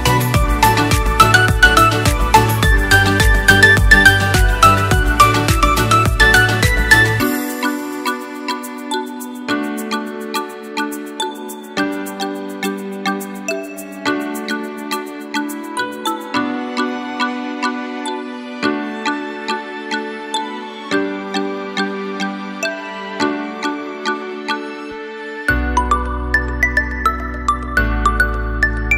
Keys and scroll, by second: 15.8 ctrl+0.